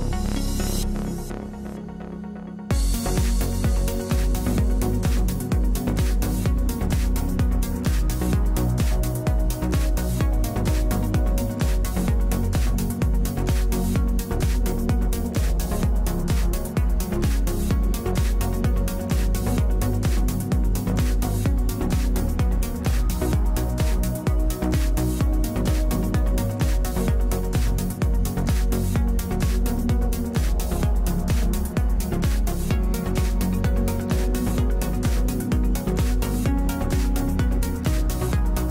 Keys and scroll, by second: 7.7 ctrl+z, 19.2 ctrl+z.